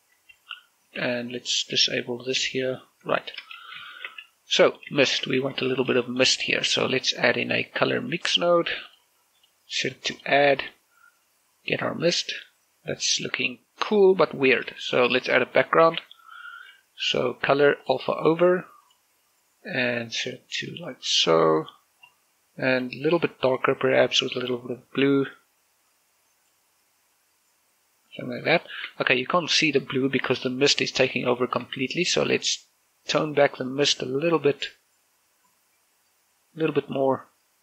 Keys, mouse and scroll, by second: 0.0-2.5 typing, 3.0-3.9 scroll up 2, 3.2 shift+middle click, 4.0 shift+middle click, 4.8 click, 5.1 shift+middle click, 5.5 g, 5.9 click, 6.1 shift+middle click, 6.7 shift+a, 8.5-14.6 drag, 14.8 click, 14.9 shift+middle click, 15.9 shift+a, 17.9-26.0 drag, 26.0 click, 27.2-28.7 drag, 28.7 shift+middle click, 31.1 scroll up 1, 31.5 shift+middle click, 32.3-37.6 drag.